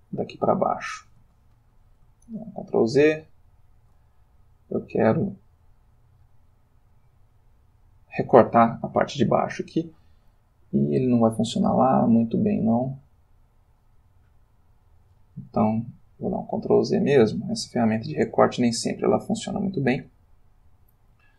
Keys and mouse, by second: 0.2 click, 1.7 ctrl+Escape, 2.3 ctrl+z, 3.2 ctrl+z, 4.6-6.4 drag, 8.8-9.9 ctrl+middle drag, 12.5 click, 13.2 click, 15.6 ctrl+z, 17.1 ctrl+z.